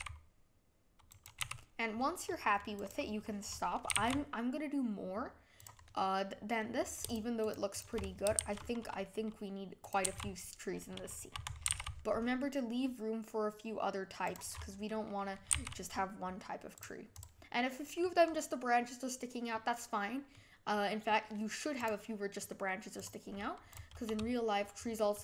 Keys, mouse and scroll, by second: 1.4 g, 3.9 g, 5.8-6.6 middle drag, 6.6-7.1 scroll down 1, 7.1 shift+click, 7.4 shift+click, 7.7 shift+click, 8.4 shift+d, 10.0 z, 11.6 g, 14.5-15.5 middle drag, 15.5 g, 17.1 click, 18.0-21.7 middle drag, 21.7 click, 22.3-22.9 middle drag, 22.9 click, 23.7 click.